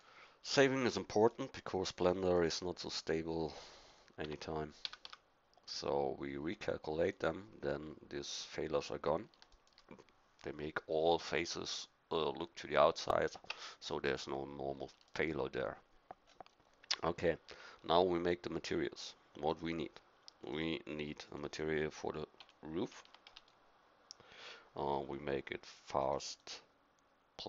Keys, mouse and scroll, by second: 4.2 Tab, 4.8 a, 5.0 a, 7.1-9.6 drag, 13.5 Tab, 23.0 o.